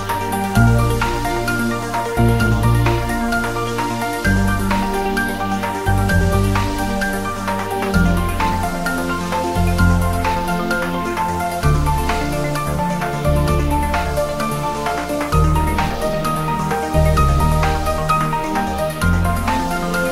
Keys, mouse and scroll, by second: 0.4 click, 0.7-1.0 scroll up 1, 1.0 s, 1.6 click, 3.3 g, 4.3 s, 4.6 click, 4.8 g, 5.5 click, 5.6 s, 6.2 click, 7.1-8.0 scroll up 3, 7.3 Tab, 7.8 click, 8.6 alt+shift+click, 9.1 ctrl+b, 10.6 click, 10.8 Tab, 11.0 scroll up 1, 11.2 scroll down 1, 11.6 scroll up 1, 12.2 scroll down 1, 12.4 Tab, 12.6 scroll up 1, 12.7 Tab, 13.2 ctrl+3, 13.8 Tab, 14.2 ctrl+r, 14.5 click, 15.4 click, 15.7 ctrl+r, 15.9 click, 16.8 click, 16.9 Tab, 17.3 scroll up 1, 17.4 scroll down 1, 18.0 click, 18.9 click, 19.3 scroll down 1, 19.8 Tab, 20.0 scroll up 1.